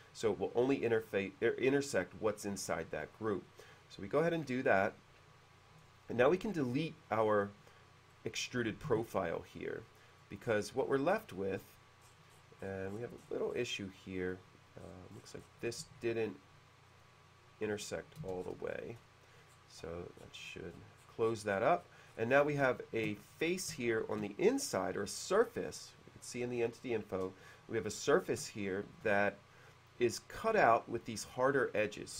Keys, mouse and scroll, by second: 5.9 click, 8.2-8.7 middle drag, 9.1 typing, 9.6-10.3 middle drag, 10.5-10.8 scroll up 1, 11.2 click, 11.6-12.0 scroll down 1, 12.1-13.9 scroll up 1, 14.0-14.4 middle drag, 14.9-15.5 scroll up 1, 15.9 q, 17.0 click, 17.9 click, 18.3 space, 18.5-19.1 middle drag, 19.1 click, 19.6-19.9 middle drag, 19.9 click, 20.3 middle click, 21.1 middle click, 21.6-21.9 middle drag, 21.9-22.5 scroll up 2, 22.8-24.2 shift+middle drag, 28.7 shift+middle click.